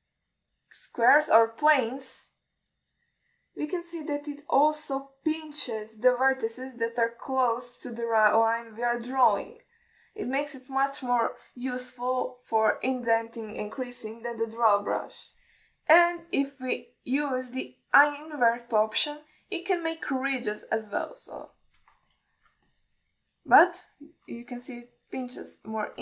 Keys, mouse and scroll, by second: 19.5 click, 21.3-23.0 drag, 23.4 alt+middle click, 24.0-25.0 drag, 25.7 middle click.